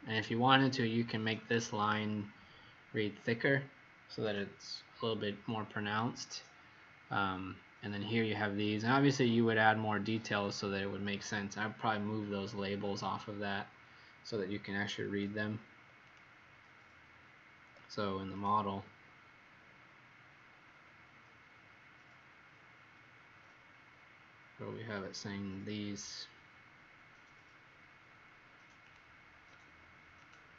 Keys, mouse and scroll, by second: 5.4-10.7 scroll up 8, 16.0 click, 19.3-19.9 scroll down 5, 20.4 scroll down 4, 22.3-23.1 scroll down 9, 23.6 scroll up 1, 26.5 middle click, 28.8 click, 29.5 Escape, 30.2 click.